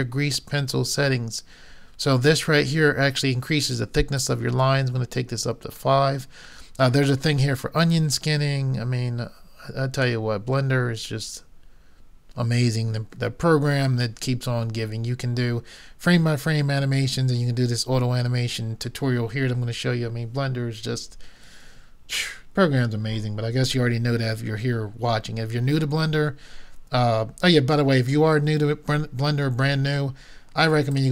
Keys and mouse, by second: 4.2-6.2 drag, 10.0-11.8 drag, 30.9-31.1 drag.